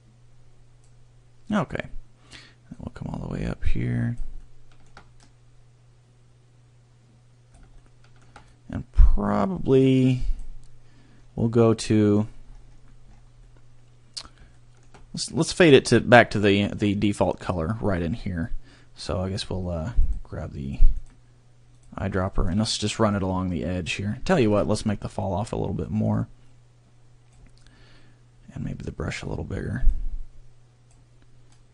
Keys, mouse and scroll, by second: 2.8 click, 5.2 click, 8.5 click, 11.1 scroll, 11.4 middle click, 12.4 scroll, 13.5 middle click, 15.1 scroll, 20.0 click, 23.1 click, 25.0-25.3 scroll, 25.9 click, 29.9 click.